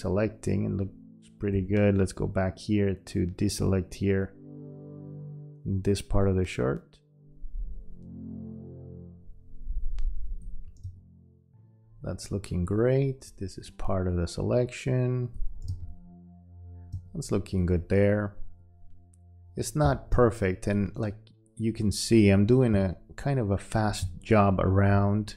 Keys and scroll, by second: 1.5 q, 10.8 space, 15.7 space, 16.9 space, 20.1 space, 22.7 space, 24.0 space.